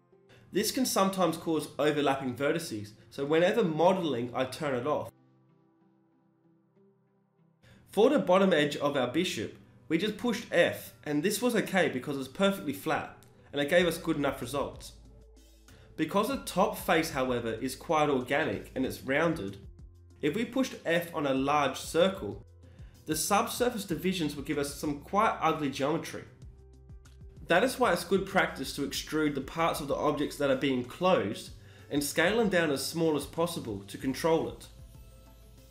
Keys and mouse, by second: 1.4 right click, 2.2 e, 5.8 g, 5.9 ctrl+r, 7.7 s, 9.6 right click, 9.7 x, 10.1 f, 26.9 e, 28.2 s, 33.8 shift+e.